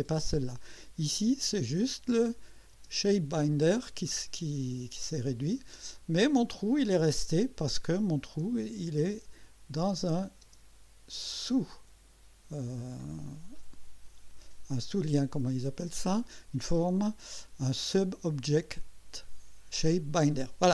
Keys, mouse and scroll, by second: 0.3-1.3 drag, 2.2 click, 2.7 space, 3.5 click, 6.0-6.9 drag, 8.2 space, 9.7 click, 10.4 space, 11.1-12.2 drag.